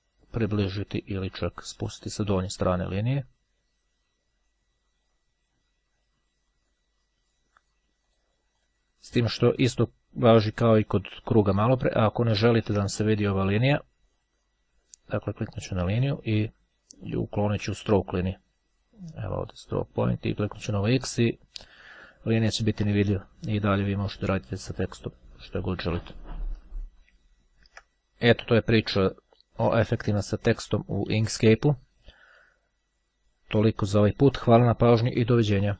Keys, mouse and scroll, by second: 8.3-9.3 drag, 9.3-9.9 scroll down 1, 10.9 scroll up 1, 11.6-12.2 ctrl+scroll up 1, 15.2 click, 19.5 click, 21.1 click, 22.9 click, 24.3-27.1 drag, 27.4-27.8 ctrl+scroll down 2.